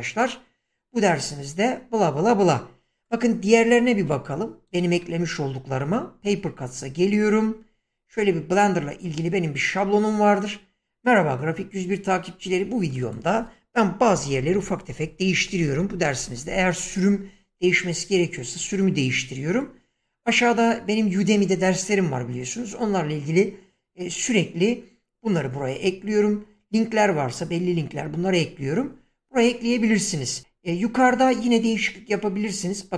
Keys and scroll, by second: 3.9 BackSpace, 13.8-16.5 typing.